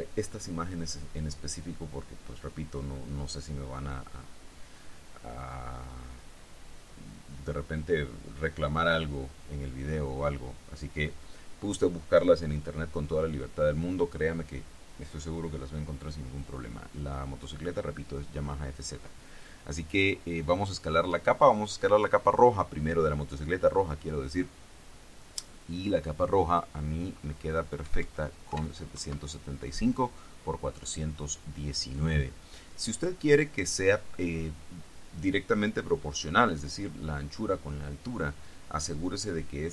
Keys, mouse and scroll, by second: 21.7 click, 28.0 KP_7, 28.6 KP_5, 29.1 Tab.